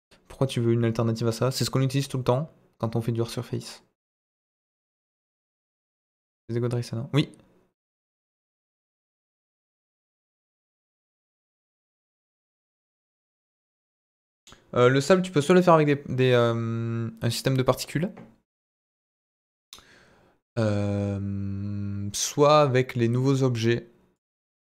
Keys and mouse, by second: 24.1 click.